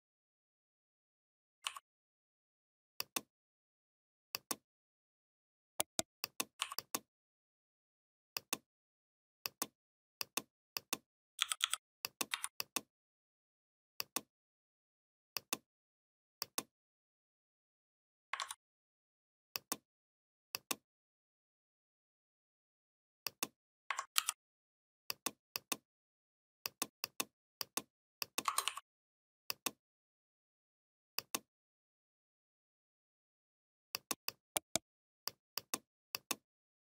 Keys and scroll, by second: 11.2 i, 12.1 v, 18.2 ctrl+z, 24.0 ctrl+g.